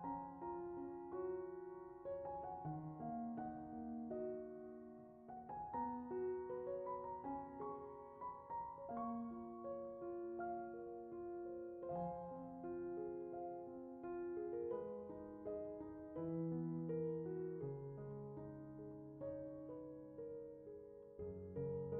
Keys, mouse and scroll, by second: 0.3 scroll up 2, 0.5 alt+s, 1.0 click, 1.2-1.5 middle drag, 1.9 shift+middle click, 2.7 click, 4.8 click, 6.7 middle click, 8.0 shift+click, 9.6 Tab, 9.8 Tab, 10.2 shift+click, 11.7 middle click, 13.7 click, 14.2 scroll down 3, 14.3 middle click, 15.4 middle click, 15.5 middle drag, 15.9 click, 16.4 click, 18.0 click, 19.0 click, 19.1-19.5 scroll up 5, 19.7 click, 20.8 click, 21.8 click.